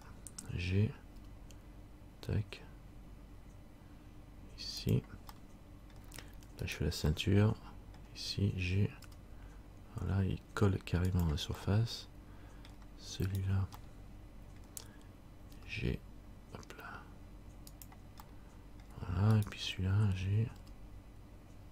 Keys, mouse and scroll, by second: 1.3 g, 6.8 middle click, 6.8 right click, 7.3 middle click, 9.2 g, 11.8 middle click, 13.5 middle click, 13.5 right click, 14.0 middle click, 15.7 g, 18.5 middle click, 19.5 right click, 20.8 g.